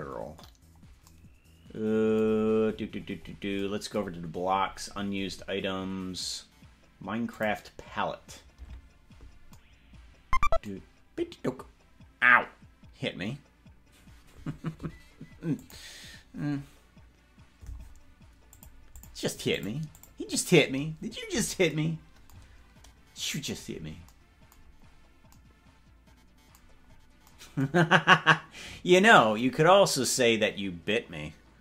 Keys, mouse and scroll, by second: 2.6-3.0 scroll down 7, 2.8 scroll up 1, 3.0-3.6 scroll down 9, 4.6-5.6 scroll down 16, 8.9 click, 23.8 scroll down 1, 25.0 scroll up 1, 26.8-27.2 scroll up 2, 29.8-30.2 scroll up 2.